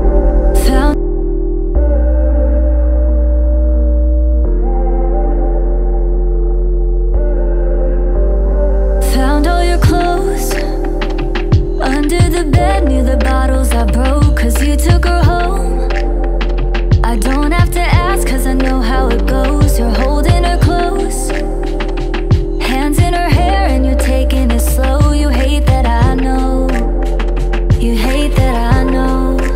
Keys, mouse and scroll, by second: 1.8 m, 2.0 o, 2.6 Return, 5.1 ctrl+click, 7.8 double click, 10.1 ctrl+scroll down 1, 11.4 right click, 13.4-14.0 ctrl+scroll down 2, 18.8 Delete, 20.5 right click.